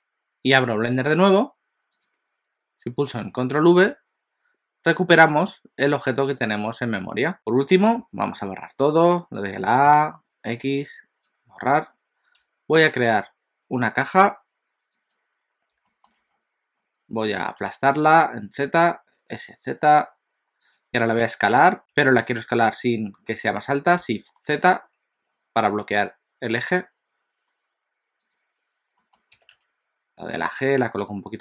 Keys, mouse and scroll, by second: 3.9 ctrl+v, 7.8 a, 10.0 x, 13.3 shift+a, 15.1 shift+a, 15.9 shift+middle click, 16.3-17.2 scroll up 4, 17.5 s, 21.3 s, 22.0 s, 29.0 middle click, 29.4 g.